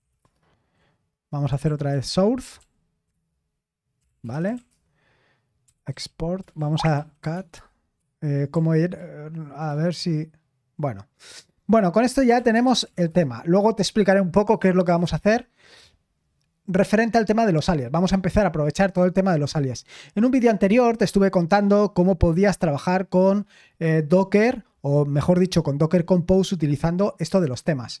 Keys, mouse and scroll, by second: 0.0-2.1 typing, 2.6 ctrl+p, 3.1 ctrl+p, 3.6-10.5 typing, 9.7 ctrl+p, 12.0-16.2 typing.